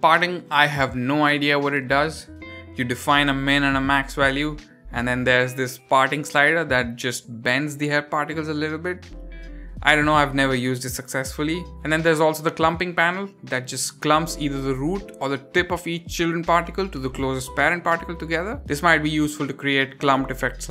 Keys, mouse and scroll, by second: 0.1-0.6 scroll up 2, 0.8-1.1 shift+middle drag, 1.2-1.8 scroll up 3, 2.0 shift+middle drag, 2.2-2.7 scroll up 2, 2.9-3.3 scroll down 1, 4.3 click, 5.7 click, 7.2-11.2 drag, 11.5-13.2 scroll up 4, 12.1 shift+middle drag, 13.3-20.7 drag.